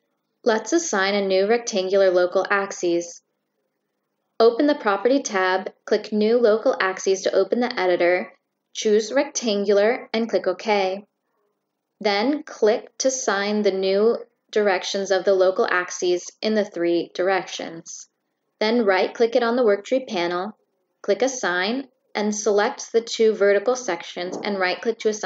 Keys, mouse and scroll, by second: 3.6 click, 9.2 click, 9.8 drag, 10.3 click, 12.6 click, 14.9 click, 16.1 right click, 18.3 click, 19.7 click, 19.9 right click, 21.1 click, 22.0 click, 23.0 click, 23.8 right click.